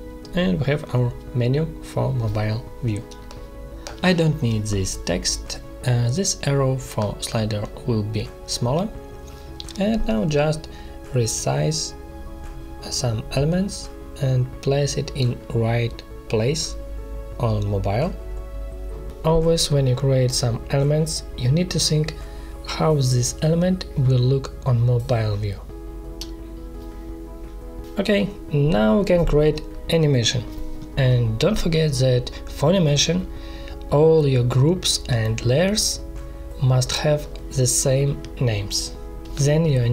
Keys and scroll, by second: 3.0 space, 17.4 ctrl+z, 18.5 shift+Up, 21.6 ctrl+z, 23.6 ctrl+z, 28.9 space, 36.1 space.